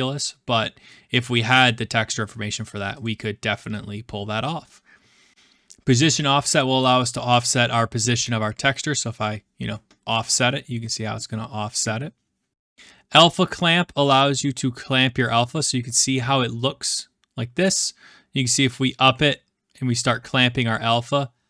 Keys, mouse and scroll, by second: 0.9-1.7 scroll, 3.0-4.2 drag, 4.6-5.3 middle drag, 4.6-5.3 scroll, 15.3-16.6 drag, 16.7 middle click, 16.8-17.6 scroll up 5, 17.6 scroll up 1.